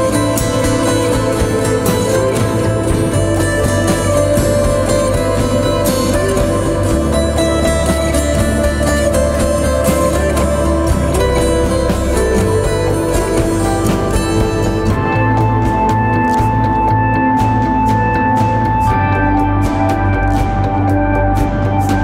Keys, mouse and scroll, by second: 12.4 double click.